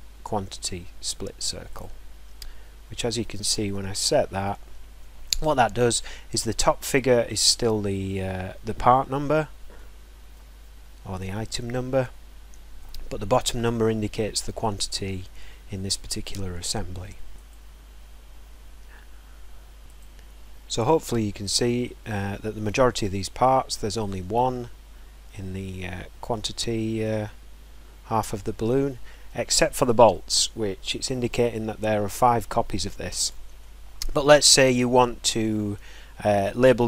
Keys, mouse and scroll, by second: 1.7 click, 3.3 click, 4.1-4.9 scroll, 7.6-7.9 scroll, 8.6 scroll, 10.2 scroll, 12.4 scroll, 12.8 middle click, 15.4 scroll, 29.6 scroll, 30.4-31.1 scroll, 33.4 scroll, 34.5 scroll.